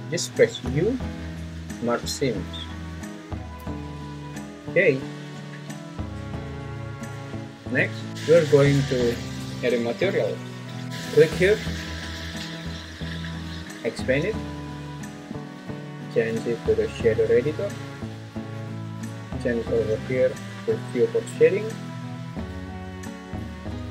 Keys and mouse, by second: 0.6 u, 5.9 `, 7.8 `, 8.1 `, 13.2-15.4 drag, 16.6-18.4 drag.